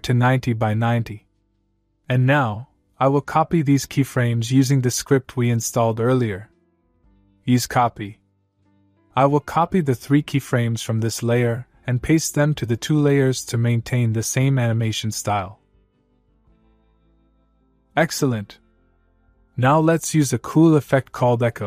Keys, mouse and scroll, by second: 7.6 click, 8.4 click, 12.3 click, 15.2 space, 18.6-21.3 click.